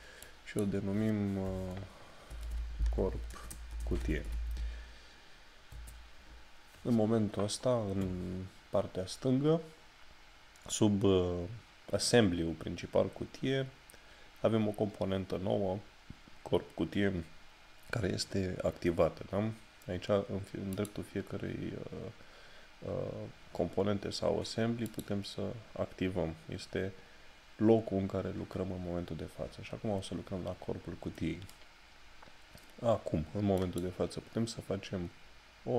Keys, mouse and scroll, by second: 20.7 click, 24.9 click, 33.6 click.